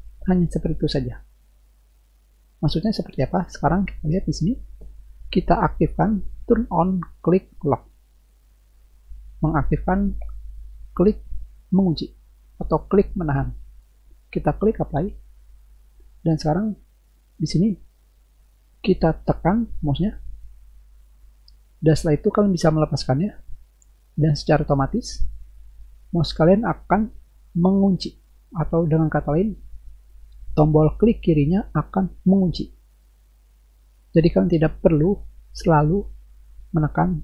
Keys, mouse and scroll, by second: 8.1 click, 15.1 click, 19.4 click, 26.9 click.